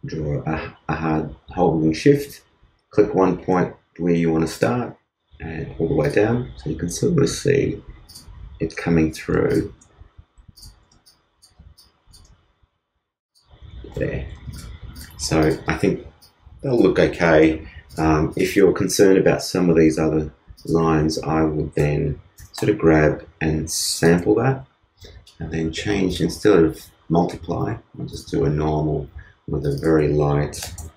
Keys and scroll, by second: 9.3 shift+space, 10.1 shift+space, 10.8 shift+space, 13.8 shift+space, 23.0 alt+0.